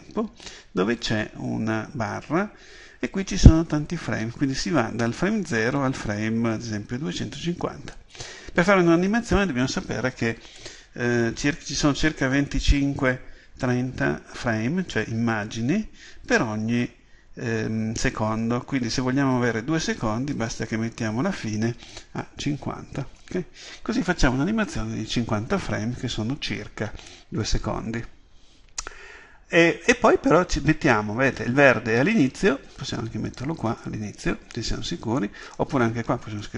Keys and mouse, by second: 20.4-36.5 drag.